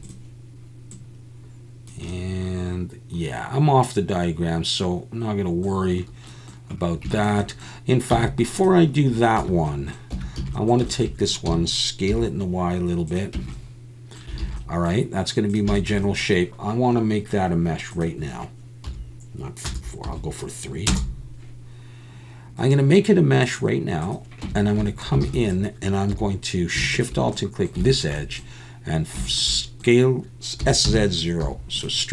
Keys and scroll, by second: 8.1 x, 9.4 Tab, 10.1 Tab, 10.4 a, 11.5 s, 12.1 y, 13.4 Tab, 14.4 alt+a, 24.4 Tab, 25.2 alt+a, 26.1 2, 30.6 s, 30.8 z, 31.4 0.